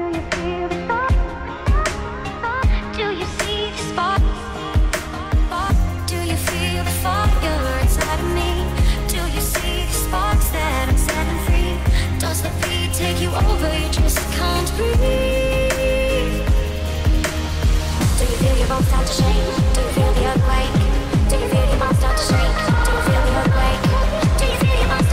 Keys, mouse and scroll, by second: 0.4 click, 1.2 KP_3, 2.6 r, 3.2 x, 5.0 click, 5.7 g, 6.1 z, 7.0 click, 8.2 click, 10.0 r, 10.5 z, 13.5 click, 14.0 r, 14.7 y, 15.6 x, 16.6 click, 17.2 g, 17.8 z, 19.5 click, 20.3 g, 20.7 y, 23.9 click, 24.4 g, 24.7 z.